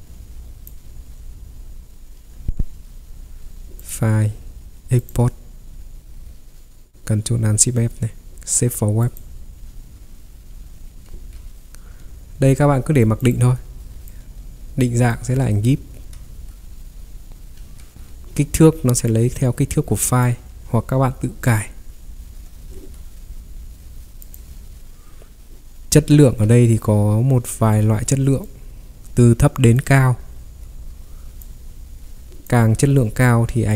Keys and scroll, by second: 2.4 Escape, 2.5 ctrl+3, 11.1 ctrl+3, 16.3 Escape, 16.5 ctrl+3, 17.6 ctrl+3, 22.8 Escape, 26.2 ctrl+3.